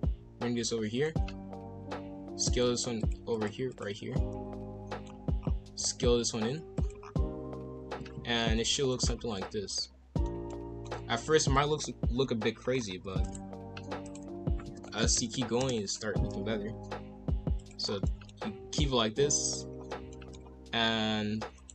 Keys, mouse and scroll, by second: 0.0 g, 2.4 alt+click, 3.0 alt+click, 3.3 alt+click, 3.7 alt+click, 4.3 scroll up 2, 4.7 shift+middle click, 5.0-5.5 shift+scroll up 6, 5.7 s, 7.0-7.9 scroll down 7, 7.9 scroll down 1, 8.4 ctrl+l, 9.3-10.8 middle drag, 10.8 scroll up 1, 11.0-13.6 typing, 12.6-13.1 scroll up 5, 14.7 r, 16.0 g, 17.8 scroll down 3, 18.0 middle click, 18.4 KP_5, 18.6 KP_1, 18.8 KP_3, 19.3 scroll up 1, 19.7 scroll down 1, 20.1 shift+middle click, 20.4 scroll up 1, 20.8 r.